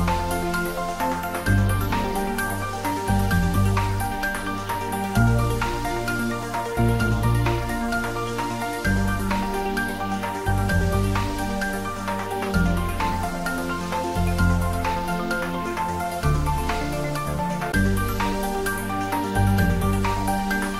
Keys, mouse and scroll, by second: 2.2 click, 3.0 Tab, 3.7 ctrl+s, 4.5 click, 5.4 Tab, 5.7-9.0 drag, 13.2 middle click, 14.1 click, 14.2 middle click, 15.2 click, 17.0 Return, 20.4-20.7 drag.